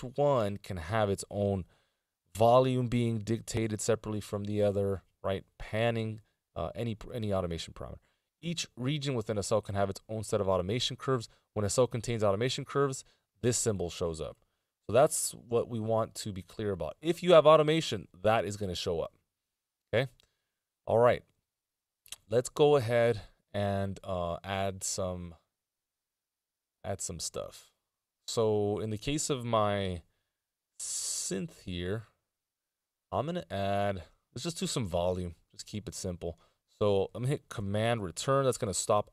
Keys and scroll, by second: 30.2 e, 38.2 super+Return.